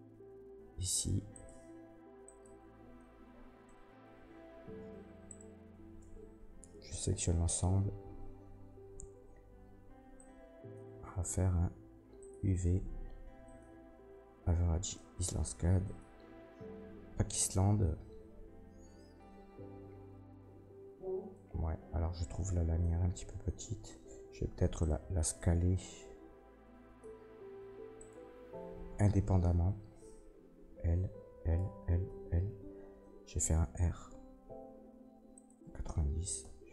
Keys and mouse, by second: 1.3-9.0 drag, 3.8 Tab, 4.1 Tab, 5.3 shift+middle click, 5.3 shift+right click, 6.0 Tab, 6.6 a, 19.4 click, 19.9 click, 20.1 click, 20.3-35.4 drag, 24.2 b, 25.1 b, 28.0 middle click, 28.0 right click, 30.6 l, 31.2 l, 31.6 l, 32.0 l, 33.8 r, 35.4-36.7 ctrl+middle drag, 36.4 s.